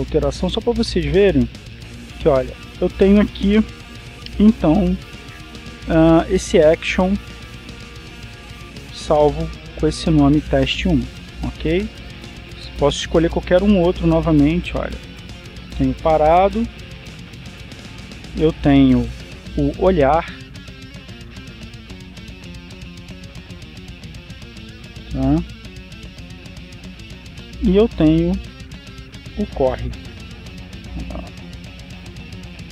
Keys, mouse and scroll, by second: 0.9-7.7 drag, 8.9 click, 12.7-13.7 drag, 14.1 click, 16.6 click, 17.8-19.4 drag, 19.6 click, 20.7 click, 21.4-26.0 drag, 27.3-29.0 drag, 29.6 click, 30.6 click, 31.5-32.7 drag.